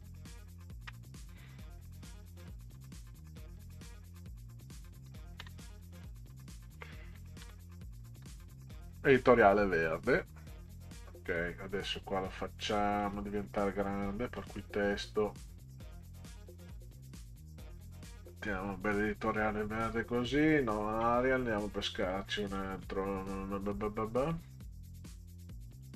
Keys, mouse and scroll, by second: 0.9 ', 4.4 click, 5.4 space, 7.2-8.9 typing, 10.8 click, 12.6 click, 14.3 click, 15.7-19.0 drag, 20.4 click, 21.0 scroll down 4, 22.0 click, 22.5-22.9 scroll down 4, 24.2 scroll down 2, 25.7 click.